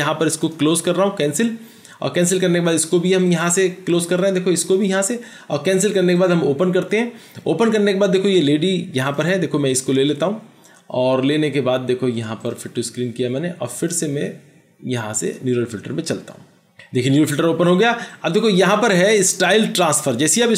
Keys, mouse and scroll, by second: 9.3 double click.